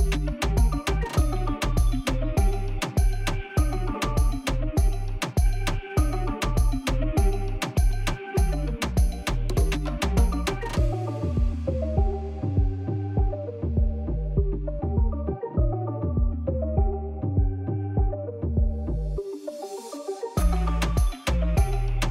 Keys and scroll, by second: 6.8 ctrl+2.